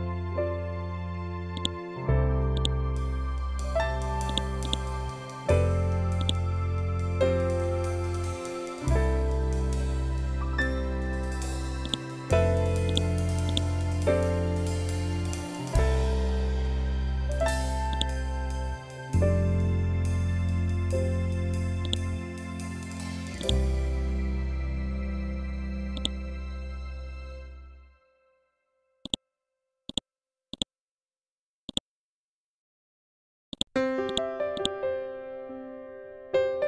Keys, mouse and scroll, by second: 1.0 click, 2.9 scroll up 1, 3.7 click, 5.7-8.7 drag, 8.7 scroll down 1, 11.3 click, 13.3 Up, 17.4 click, 17.7 Up, 20.1 scroll up 1, 21.3-26.7 drag, 26.7 scroll down 1, 28.5 click, 31.8 Up, 33.0 click, 34.6 ctrl+z, 35.1 scroll down 1.